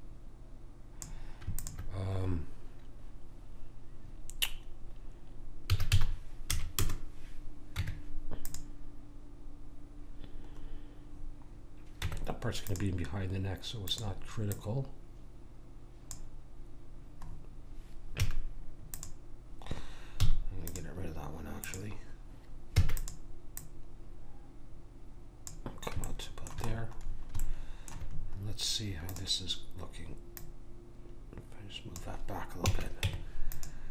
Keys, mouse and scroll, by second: 5.6 s, 7.7 Tab, 12.0 Tab, 13.8 click, 18.2 a, 18.9 click, 20.2 x, 21.6 click, 22.7 e, 23.7 click, 26.2-29.0 middle drag, 29.0-32.2 drag, 32.6 a, 33.0 Tab.